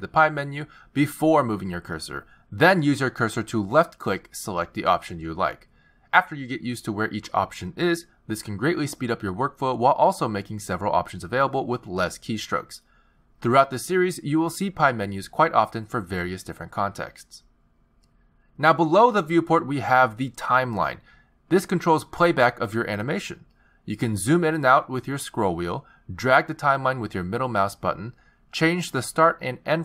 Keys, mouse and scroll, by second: 0.2 z, 14.6 z, 16.1 shift+s, 21.2 click, 22.3 click, 24.2 click, 25.4-25.9 scroll down 6, 26.0-26.6 scroll up 5, 26.6-27.0 scroll down 3, 27.0-28.1 scroll up 4, 28.1 middle click.